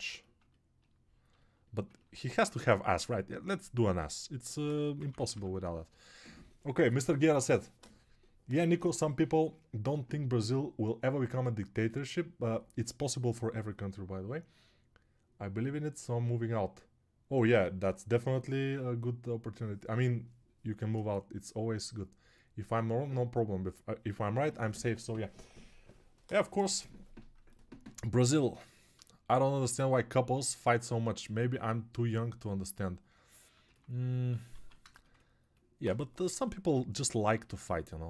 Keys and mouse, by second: 28.1-33.7 drag.